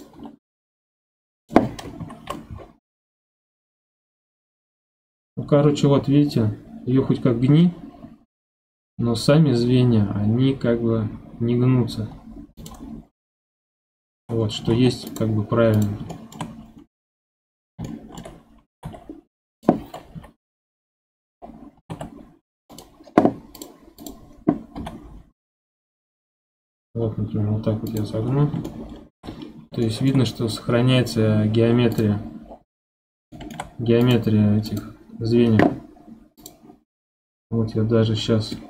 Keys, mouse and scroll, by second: 0.1 g, 2.0 KP_1, 2.9 g, 13.0-13.7 scroll down 2, 13.7 middle click, 14.4-14.7 scroll up 2, 14.7 ctrl+Tab, 15.7 drag, 16.1-16.5 shift+middle drag, 16.5 scroll up 4, 17.0-18.7 middle drag, 18.7 g, 20.1 KP_1, 21.0-21.5 scroll down 12, 21.8 g, 23.5 click, 24.0 click, 24.7 g, 28.2 scroll up 7, 28.6-29.4 shift+middle drag, 29.6 scroll up 3, 29.8-31.9 shift+middle drag, 31.9 click, 32.4-33.3 scroll down 9, 33.3-34.0 shift+middle drag, 34.0 click, 34.7 click, 36.4 click, 38.4 scroll down 1, 38.5-38.6 middle drag.